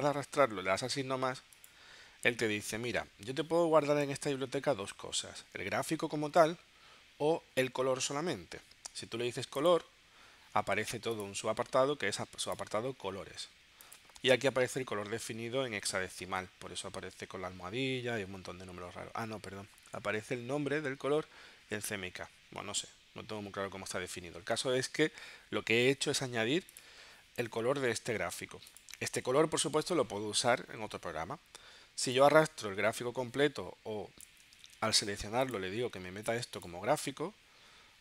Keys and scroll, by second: 34.7 super+z.